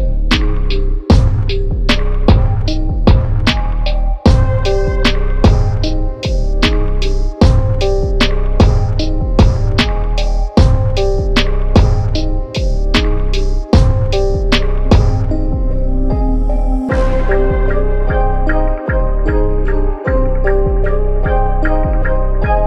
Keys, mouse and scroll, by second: 2.1 click, 6.5 click, 10.2 Tab, 13.1 click, 19.3 Tab, 21.5 click, 22.4 Tab.